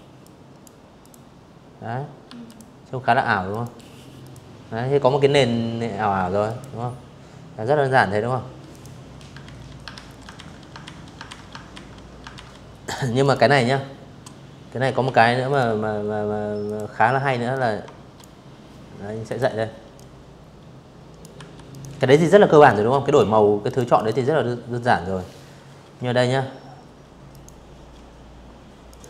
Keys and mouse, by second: 0.1 click, 1.2 click, 1.9 click, 4.1 click, 6.4 click, 7.1 ctrl+z, 7.6 ctrl+z, 8.0 ctrl+z, 8.5 ctrl+z, 8.9 ctrl+z, 9.4 ctrl+z, 10.0 ctrl+z, 10.5 click, 10.9 click, 12.7 Delete, 13.2 click, 14.3 click, 15.2 shift+click, 16.9 click, 17.6-18.8 drag, 19.0 v, 19.4 click, 20.3 click, 21.3 click, 21.6 click, 25.0 click, 26.6 click, 26.7 click, 27.9 drag, 29.0 click.